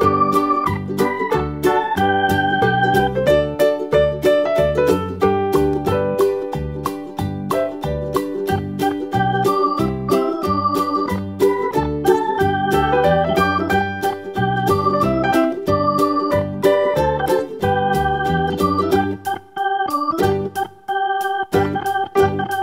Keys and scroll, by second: 3.2 d.